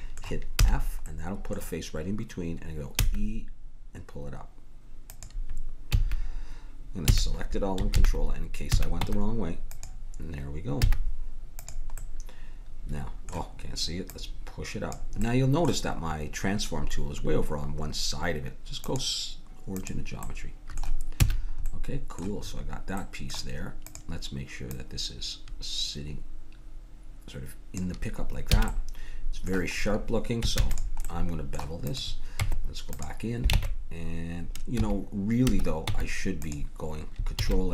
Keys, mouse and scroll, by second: 0.6 f, 3.0 e, 5.9 a, 7.0 a, 7.9 ctrl+n, 9.0 Tab, 9.0 a, 10.8 z, 12.2-14.1 middle drag, 14.1-16.9 drag, 15.2-16.9 middle drag, 18.8-20.8 drag, 20.3 middle click, 21.2 a, 23.9-26.4 drag, 28.6 a, 28.7-31.9 middle drag, 30.6 ctrl+s, 32.4 Tab, 33.5 ctrl+Tab, 35.9 Tab.